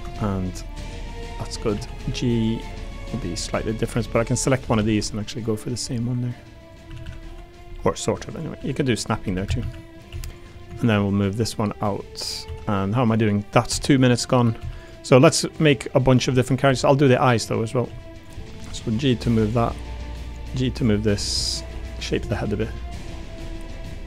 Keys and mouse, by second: 0.1 middle click, 1.1 click, 1.7 a, 2.0 g, 4.6 a, 4.8 a, 5.0 b, 5.8 g, 6.7 click, 6.9-10.1 typing, 8.6 click, 8.9 middle click, 9.8 click, 12.4 2, 13.1 click, 13.7 2, 14.1 middle click, 14.6 1, 14.8 click, 15.4 click, 16.3 middle click, 16.6 3, 17.1 middle click, 17.8 2, 18.4 middle click, 18.6 g, 19.5 click, 19.7 middle click, 20.4 g, 20.9 click, 21.3 1, 21.5 click, 21.7 g, 22.0 click, 22.9 click, 23.3 2, 23.6 click, 23.9 middle click.